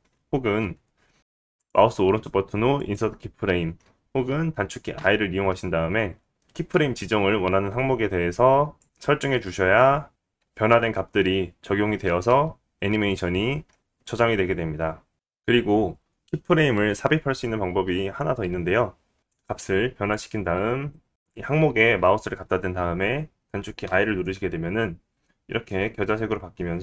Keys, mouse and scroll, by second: 1.2-4.5 right drag, 4.5-15.1 drag, 4.9 i, 19.2 click, 20.2 click, 23.8 i.